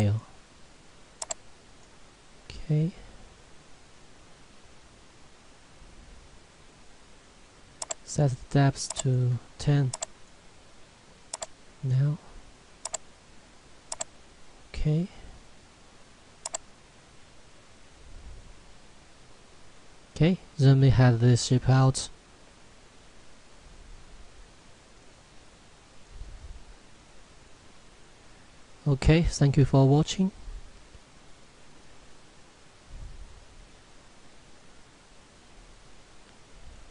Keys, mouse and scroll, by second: 7.8 click, 19.8 middle click, 20.0 scroll up 1, 22.5 shift+middle click, 30.2 scroll down 1, 33.0 middle click, 36.8 F10.